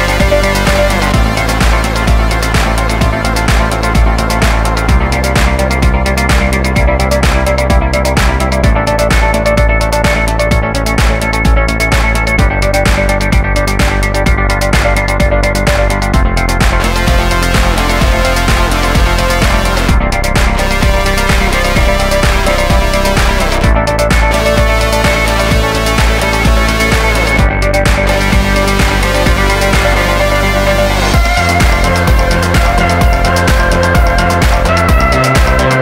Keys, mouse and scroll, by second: 0.2-1.0 scroll up 1, 1.0 scroll up 1, 2.4 click, 2.8 click, 3.1 click, 3.2 right click, 3.2 click, 3.4 click, 3.5 right click, 3.6 click, 3.9 click, 4.1 shift+right click, 4.2 f, 4.4 right click, 4.6 shift+right click, 4.7 f, 4.8 right click, 5.1 f, 6.8 click, 6.9 click, 7.2 middle click, 7.3 middle click, 7.6 middle click, 7.6 scroll up 1, 7.7 middle click, 7.8 middle click, 7.9 middle click, 8.1 shift+middle click, 8.5 alt+right click, 9.0 click, 9.1 click, 9.2 scroll down 1, 9.3 middle click, 9.5 middle click, 9.7 alt+right click, 9.9 click, 10.0 click, 10.1 1, 10.2 scroll down 1, 10.4 shift+middle click, 11.1 middle click, 13.6 click, 14.8 click, 15.8 middle click, 16.2 middle click, 16.4 click, 16.5 click, 17.6 middle click, 18.0 middle click, 18.2 shift+click, 18.4 scroll down 1, 18.5 middle click, 18.6 middle click, 19.0 click, 19.6 click, 20.0 scroll down 1, 20.1 middle click, 20.4 middle click, 21.2 middle click.